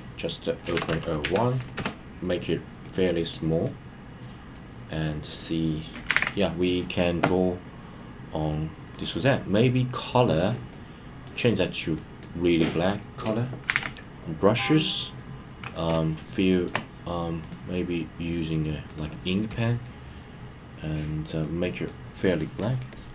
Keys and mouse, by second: 0.8 KP_0, 3.3 click, 4.5 middle click, 6.1 super+z, 8.9 click, 10.7-11.2 drag, 12.0 click, 13.7 super+z, 16.1 middle click, 17.5-18.9 drag, 21.4-21.9 drag, 22.6 click, 22.9 click.